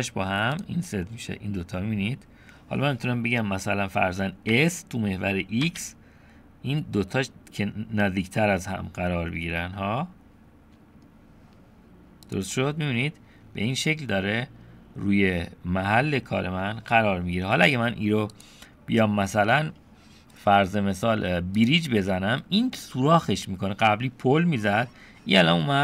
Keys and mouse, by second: 1.1-2.1 drag, 2.1 middle click, 4.5 s, 13.0-16.1 middle drag, 18.4-21.7 drag, 22.4 middle click, 23.7 middle click.